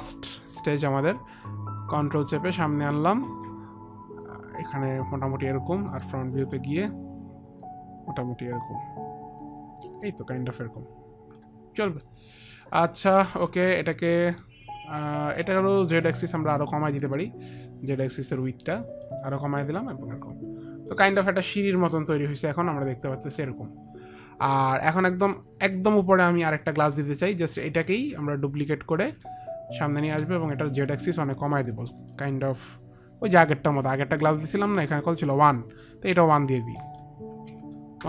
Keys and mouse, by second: 1.5 ctrl+click, 3.2 ctrl+click, 4.6 ctrl+click, 6.2 middle click, 6.8 middle click, 6.8 click, 7.9 click, 7.9 middle click, 8.8 middle click, 9.8 click, 11.0 click, 12.9 middle click, 13.9 alt+click, 16.0 middle click, 17.3 middle click, 18.6 click, 20.0 click, 20.0 middle click, 20.7 click, 21.5 middle click, 21.5 click, 22.1 middle click, 25.7 alt+click, 29.6 ctrl+click, 32.6 ctrl+click, 34.7 click, 36.1 click, 36.9 click, 37.8 KP_1.